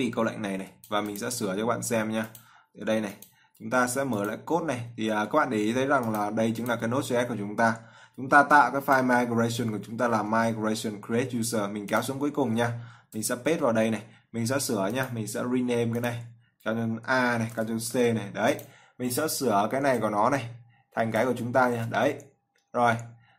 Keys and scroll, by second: 13.9 ctrl+v, 17.7 ctrl+a, 18.2 ctrl+c, 22.0 ctrl+v.